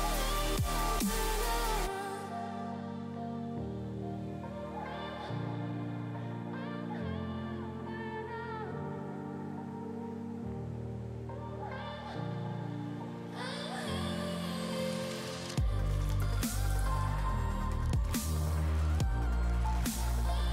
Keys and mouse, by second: 0.5 space, 0.6 click, 0.9 click, 2.1 click, 2.9 space, 3.3 click, 6.6 click, 9.6 click, 13.8 click, 17.0 click.